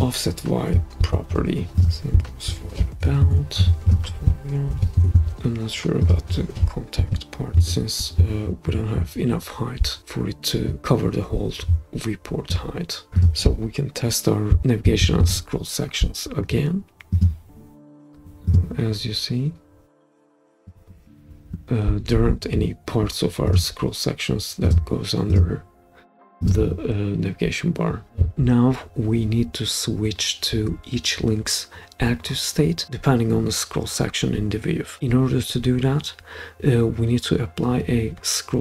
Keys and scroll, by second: 1.0 super+c, 2.5 super+v, 3.2 Return, 4.7 super+v, 4.9 Return, 7.0 super+v, 7.6 Return, 15.2 super+p.